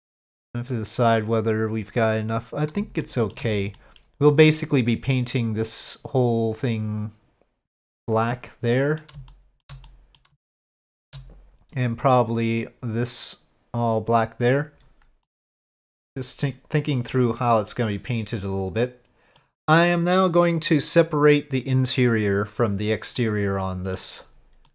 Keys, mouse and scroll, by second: 3.0 shift+middle click, 3.8 middle click, 8.3 middle click, 9.3 shift+middle click, 9.8 middle click, 10.5 shift+middle click, 15.2 middle click, 17.4 middle click, 17.6 click, 17.8-19.4 middle drag, 23.2 middle click, 24.6-24.7 middle drag.